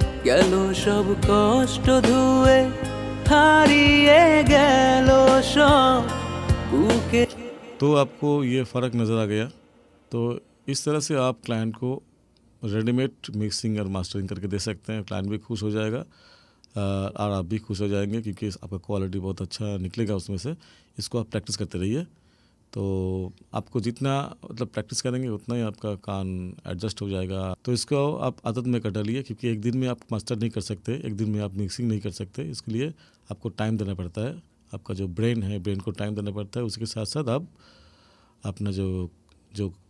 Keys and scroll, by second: 7.2 space.